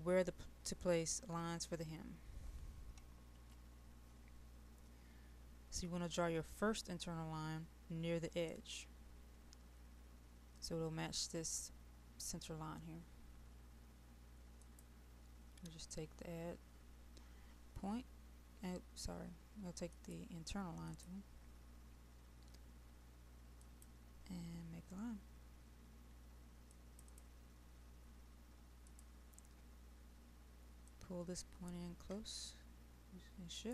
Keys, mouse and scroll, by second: 3.4 ctrl+z, 14.6-33.7 drag.